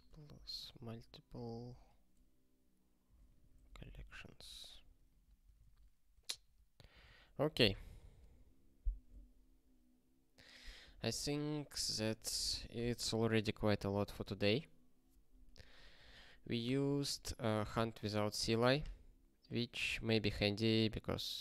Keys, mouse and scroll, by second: 0.0-5.0 typing, 5.0 alt+q, 5.6 ctrl+s, 6.3 ctrl+n, 6.5 ctrl+a, 7.6 ctrl+s, 15.5 ctrl+p, 15.9 ctrl+space, 16.1 ctrl+n, 17.0 ctrl+g, 20.1 ctrl+s.